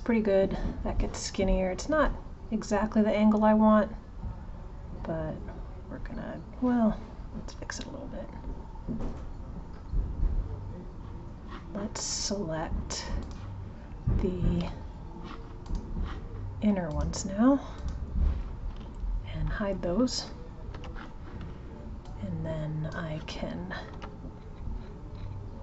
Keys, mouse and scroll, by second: 13.2-15.7 drag, 16.9 click, 17.7-20.7 drag, 20.7 h, 22.0 click.